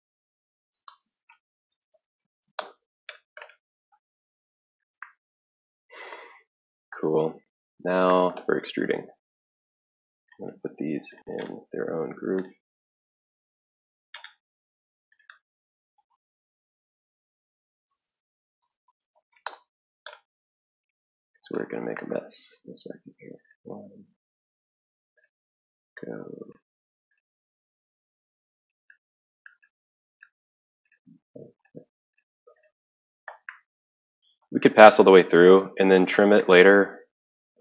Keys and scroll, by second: 0.0-3.0 typing, 15.6-16.8 typing, 17.9-19.9 typing, 21.8 typing.